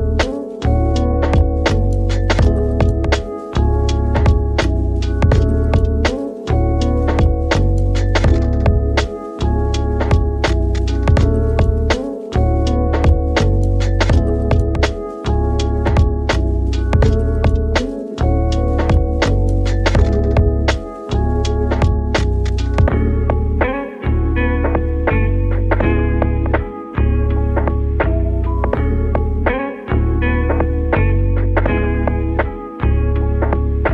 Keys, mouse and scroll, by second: 3.5-6.5 middle drag, 8.5 click, 9.1-9.9 scroll up 2, 9.9-12.9 right drag, 12.9 Tab, 14.5-14.9 scroll up 2, 14.9 shift+middle click, 15.4 2, 15.6 scroll up 2, 16.1-17.2 shift+middle drag, 17.2 alt+click, 17.8 f, 18.3-18.8 scroll down 3, 19.3-22.3 middle drag, 22.3 alt+click, 22.8 f, 23.2 middle click, 23.7 Tab, 24.0 scroll down 1, 24.2-24.8 middle drag, 24.8 ctrl+3, 25.2-25.6 scroll up 2, 25.6-26.5 middle drag, 26.5-27.1 scroll up 1, 27.1 Tab, 27.3-27.7 scroll up 1, 27.7-28.1 shift+middle drag, 28.1-28.8 scroll up 1, 28.8-30.1 middle drag, 30.1 click, 30.5 3, 30.7 click, 32.1 i.